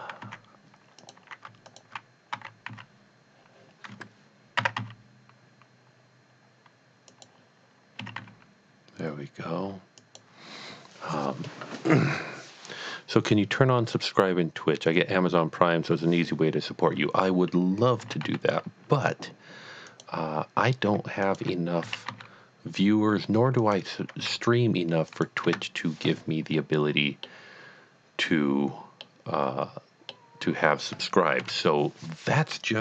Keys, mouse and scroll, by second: 0.3 x, 1.0 click, 1.6 alt+click, 2.3 d, 2.7 z, 4.6 e, 4.8 z, 7.1 click, 8.0 typing, 10.0 click, 18.3 typing, 19.9 click, 21.2 alt+click, 21.9-22.2 typing, 23.6 click, 24.1 typing, 25.2 click, 25.4 Tab, 26.5 middle click, 27.2 middle click, 27.6-28.2 scroll down 2, 29.0-30.8 middle drag, 31.4 KP_1.